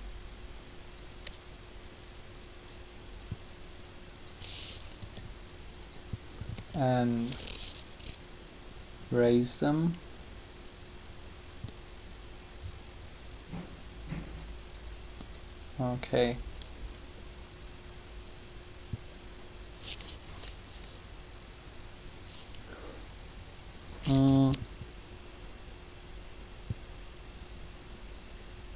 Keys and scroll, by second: 5.0 r.